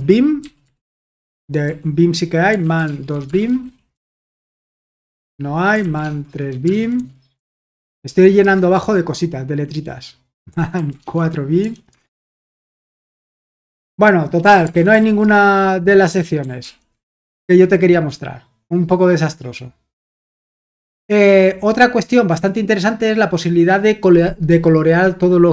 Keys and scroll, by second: 0.0-8.4 typing, 10.2-16.6 typing.